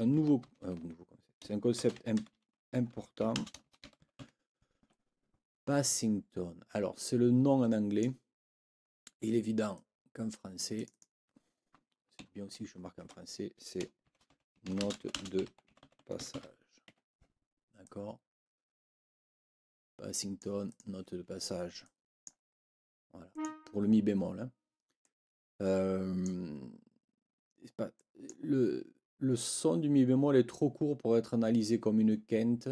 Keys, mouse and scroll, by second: 0.5 ctrl+t, 1.5-4.7 typing, 4.8 Escape, 5.9-8.2 drag, 9.7-11.2 drag, 12.2 End, 13.2 Return, 13.8-16.8 typing, 16.9 Escape, 17.8-20.6 drag, 20.7 click, 21.8 click, 23.3 click, 25.0-26.4 drag, 27.9 click.